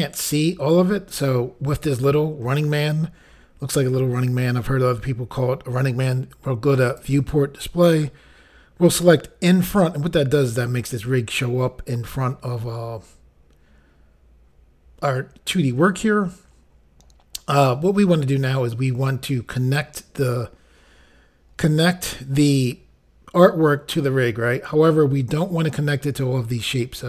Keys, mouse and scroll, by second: 6.9 click, 7.0 click, 9.5 click.